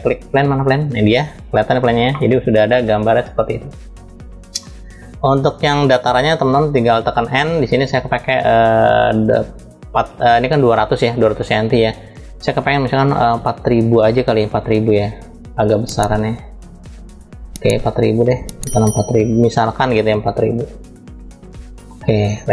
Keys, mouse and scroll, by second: 1.8-5.1 middle drag, 9.0-17.3 drag, 18.1-21.8 drag, 20.4 0.